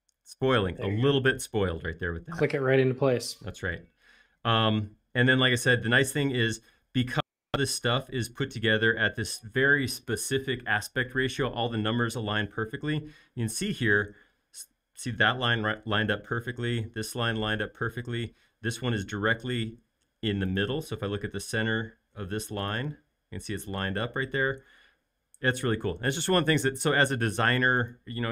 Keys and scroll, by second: 2.9 space, 21.2 |, 24.4 space.